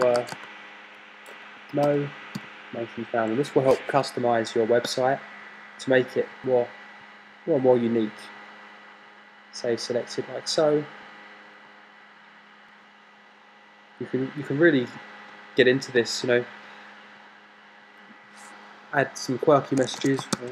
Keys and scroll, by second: 0.0-1.0 typing, 2.2-3.1 typing.